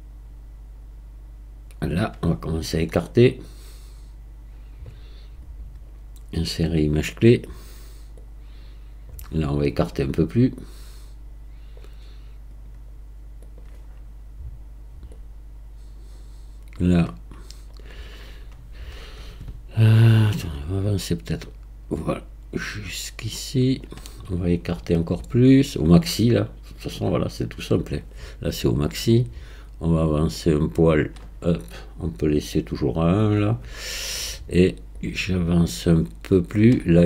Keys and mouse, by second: 3.5-4.9 drag, 5.6-7.8 right drag, 8.2 click, 10.7-11.7 drag, 12.5-13.6 drag, 15.1 click, 20.8 click, 25.0-26.1 drag, 26.9-27.9 middle drag, 29.2 click, 32.4-36.6 drag.